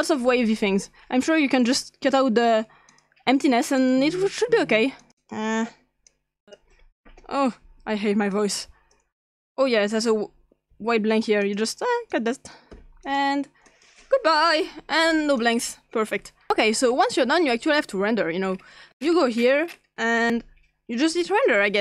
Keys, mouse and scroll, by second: 0.0 click, 2.9 click, 3.8 click, 5.0 click, 5.2 click, 6.1 click, 7.4-7.9 scroll down 3, 8.3-9.0 drag, 8.3 scroll down 1, 10.7 x, 11.4 click, 12.1 click, 12.8-14.4 typing, 13.0 click, 13.7 click, 14.0 click, 14.4 Delete, 15.4 click, 16.5-17.9 scroll up 2, 20.2 click.